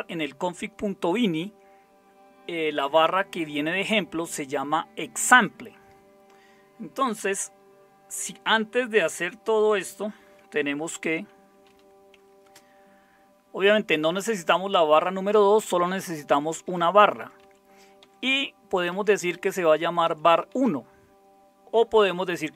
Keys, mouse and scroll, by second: 11.6 #, 12.4 space, 15.6 Up, 16.3 Right, 16.5 Right, 16.6 Right, 16.8 Right, 17.0 Right, 17.4 Right, 18.0 Right, 18.2 Right, 18.9 Left, 20.1 Right, 20.5 Right, 22.5 Left.